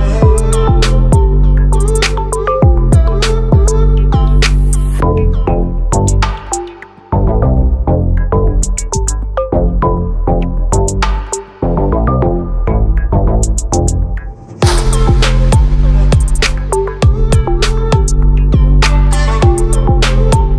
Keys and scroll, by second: 17.9 ctrl+r, 18.5 ctrl+t.